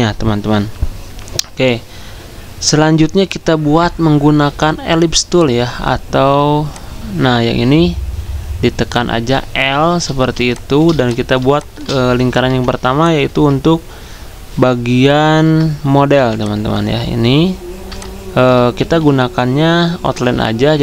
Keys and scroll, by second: 10.9 z, 12.4 l, 18.6 d.